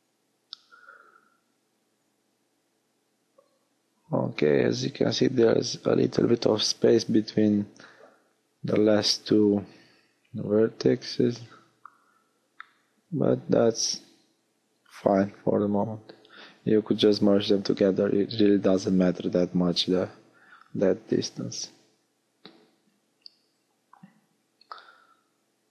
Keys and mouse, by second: 5.0-8.3 middle drag, 7.6 r, 15.8 click, 16.5-18.0 middle drag, 19.1-22.8 middle drag.